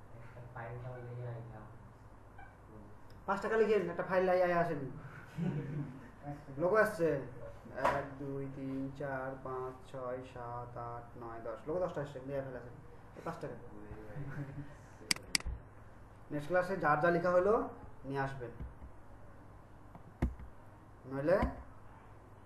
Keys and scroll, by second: 18.7 Right.